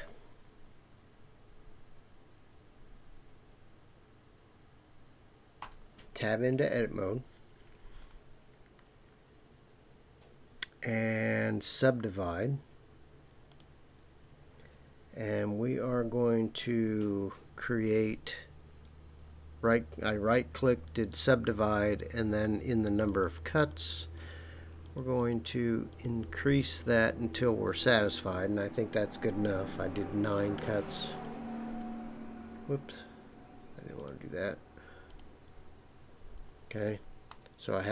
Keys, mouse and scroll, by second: 5.6 Tab, 8.0 right click, 23.0 click, 23.4 click, 23.7 click, 23.9 click, 24.2 click, 24.8 click, 25.2 click, 25.9 click, 31.1 click, 33.9 click, 35.1 click, 37.3-37.9 middle drag.